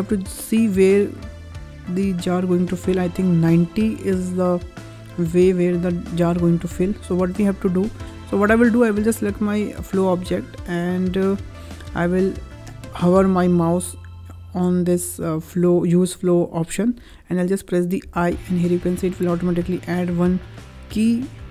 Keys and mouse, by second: 0.2-5.0 drag, 7.3 click, 17.9 i, 20.2 click.